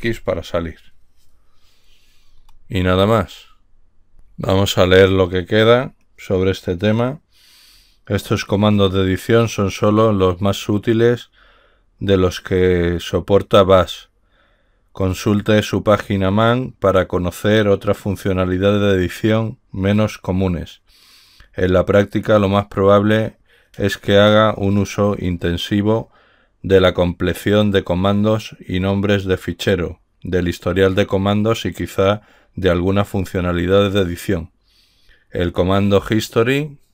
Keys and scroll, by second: 0.0 ctrl+x.